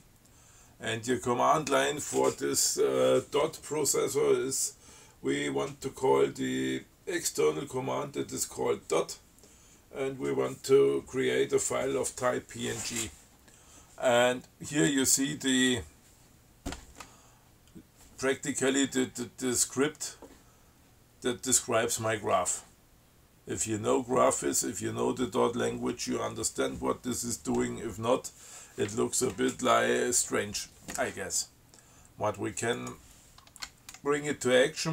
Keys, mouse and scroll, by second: 33.0 click.